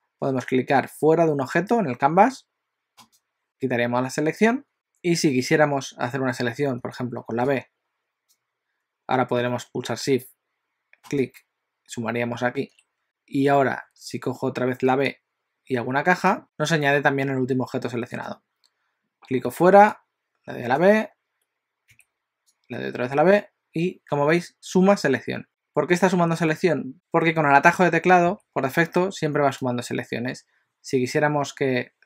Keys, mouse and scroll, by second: 3.1 click, 6.8 b, 11.1 shift+click, 13.0 b, 18.3 click, 19.5 b, 22.0 b, 28.3 b, 30.2 a.